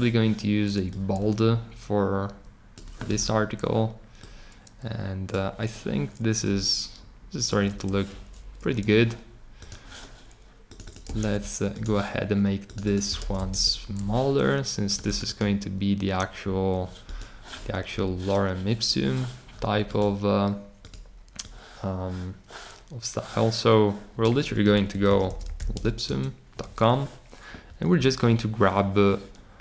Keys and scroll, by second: 11.2 super+c, 13.1 super+v, 13.5 Return, 24.5-26.2 typing.